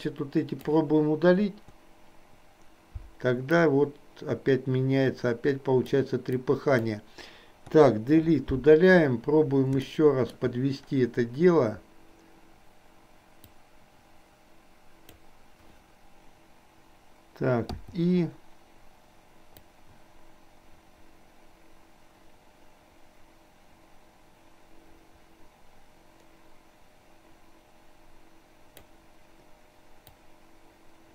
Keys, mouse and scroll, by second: 0.0 click, 1.6 Delete, 3.7-6.1 drag, 6.5 click, 7.9 Delete, 10.0 shift+middle click, 13.5 click, 13.9-15.2 drag, 19.7-29.0 drag, 30.5-31.1 drag.